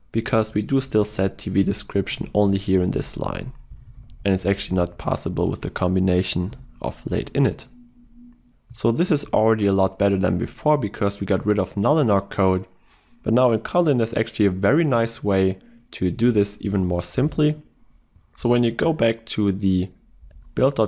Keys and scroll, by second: 16.2 ctrl+e.